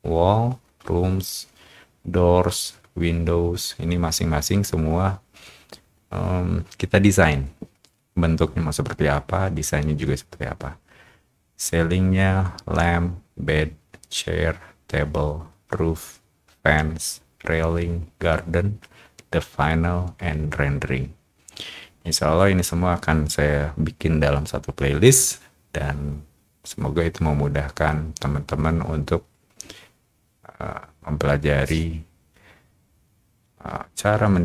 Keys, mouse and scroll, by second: 1.1 middle click, 10.8 middle click, 12.1-13.2 middle drag.